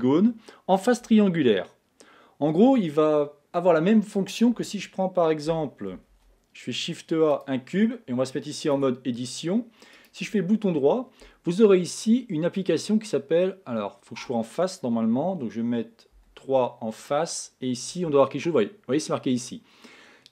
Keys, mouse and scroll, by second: 5.5 a, 6.1 shift+a, 7.9-8.8 scroll down 4, 8.8 Tab, 10.0-16.2 right drag, 16.2 3, 17.0-20.2 right drag.